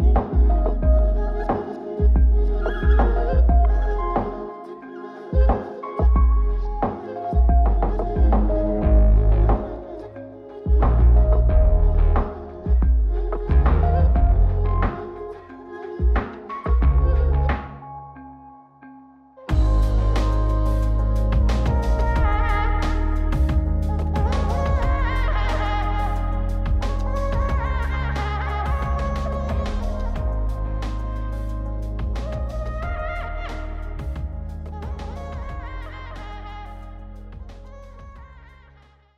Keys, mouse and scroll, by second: 0.7-2.3 ctrl+right drag, 2.9-4.6 drag, 5.3-6.5 drag, 7.0 ctrl+shift+click, 7.9 middle click, 10.2 middle click, 10.8 scroll up 2, 11.1 middle click, 12.1-14.5 shift+drag, 14.6-15.9 drag, 16.0-18.6 shift+drag, 19.2-20.6 scroll up 2, 20.6-26.9 drag, 27.6-28.9 scroll down 4, 28.9 middle click, 29.5-30.0 scroll up 1, 30.1-31.4 scroll down 2, 31.4-32.3 scroll up 2, 32.3 click, 35.6-36.0 scroll up 1, 36.0-36.4 scroll down 4, 36.8 middle click, 37.2 scroll up 2, 37.7 middle click, 38.3-38.7 scroll up 1.